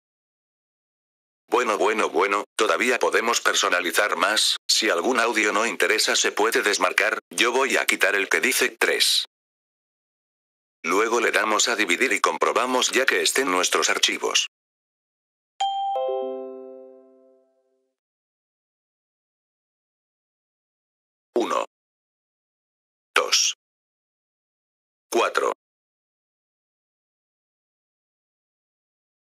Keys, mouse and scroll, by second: 0.9 F4, 1.3 click, 2.7 click, 5.1 click, 5.7 click, 8.4 click, 14.0 click, 19.5 click, 20.3 click, 20.6 click, 22.3 click, 22.6 click, 24.4 click, 24.6 click.